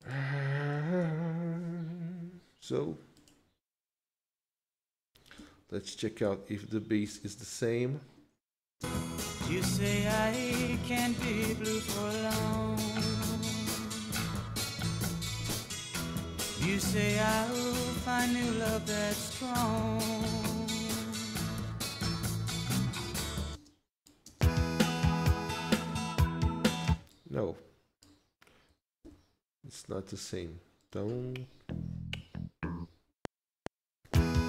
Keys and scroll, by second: 1.0 ctrl+s, 5.5 Tab, 7.1 alt+Tab, 8.9 space, 10.1 Tab, 10.6 alt+Tab, 16.3 ctrl+Right, 18.2 ctrl+s, 23.6 space, 26.8 space, 29.0 ctrl+x, 33.1 F7.